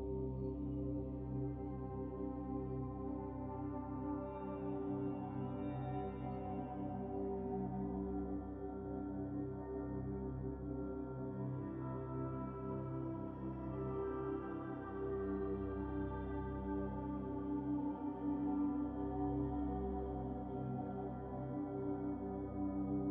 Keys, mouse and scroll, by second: 0.8 click, 1.4 middle click, 2.0 click, 2.4 click, 5.1 drag, 5.7-6.8 drag, 6.8-7.5 scroll down 7, 7.5 scroll up 3, 7.7-8.9 middle drag, 8.9 Tab, 9.5 click, 13.5-14.0 middle drag, 14.0-14.3 scroll up 8, 14.3-15.1 middle drag, 15.1 scroll down 3, 15.4-17.2 middle drag, 17.2 scroll down 3, 17.4-17.9 middle drag, 17.9-18.3 scroll down 2, 18.8-20.6 shift+middle drag, 22.1 a.